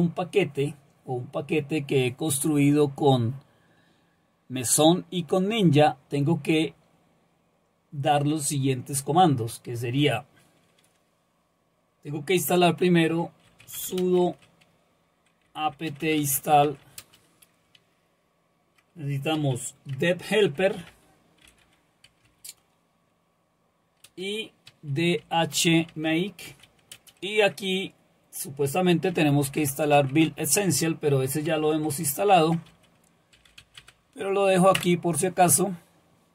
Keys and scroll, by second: 13.2-17.3 typing, 19.1-22.8 typing, 24.1-27.2 typing, 28.9-35.3 typing.